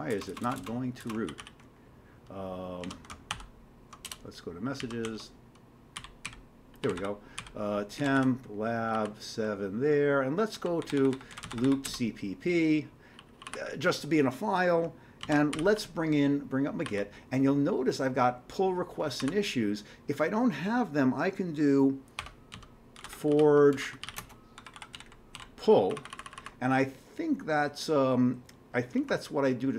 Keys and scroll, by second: 0.1-1.0 typing, 1.2 ctrl+g, 1.4 ctrl+g, 2.8 ctrl+x, 3.3 ctrl+b, 4.1 Return, 4.8 ctrl+x, 5.0 ctrl+f, 6.0-14.0 typing, 8.9 Down, 15.2 ctrl+x, 15.2-17.3 typing, 19.0-19.7 typing, 22.2 Escape, 22.3-25.8 typing, 26.0 Down, 26.1 Down, 26.2 Down.